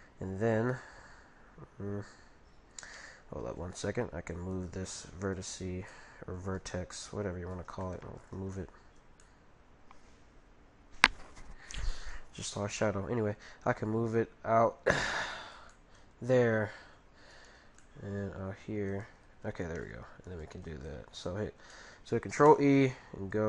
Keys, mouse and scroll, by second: 3.4 ctrl+t, 4.6 ctrl+t, 5.3-6.8 right drag, 5.9-7.6 middle drag, 7.0 z, 8.5-11.0 middle drag, 8.7 right click, 13.2 g, 15.7-17.3 middle drag, 17.3-18.9 right drag, 17.8-19.6 middle drag, 18.2 g, 19.6-22.0 right drag, 21.7-23.4 middle drag.